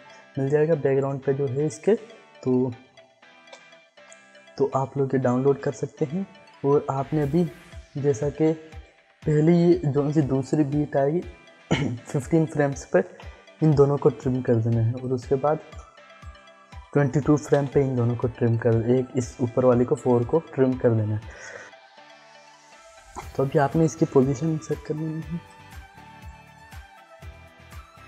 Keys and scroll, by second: 3.1 l, 13.0 alt+[, 17.5 alt+[, 24.3 p, 26.5 ctrl+z.